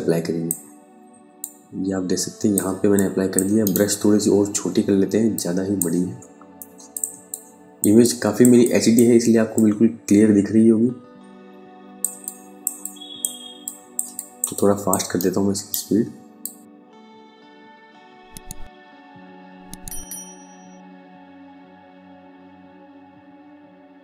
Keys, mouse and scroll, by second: 2.2 space, 2.4 click, 2.8 space, 3.1 right click, 4.8 click, 6.5 space, 6.7 click, 7.5 space, 8.1 click, 11.5 space, 11.7 click, 12.1 space, 13.1 click, 13.6 ctrl+alt+click, 14.6 alt+right click, 15.9 click, 21.0 click, 21.3 click, 21.6 right click, 21.7 click, 22.4 right click, 22.5 click.